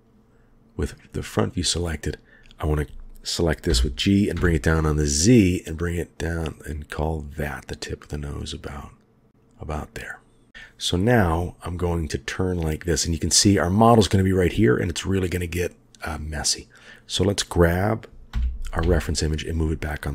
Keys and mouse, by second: 2.5 click, 3.7 g, 10.5 KP_1, 11.6-13.3 middle drag, 18.3 g.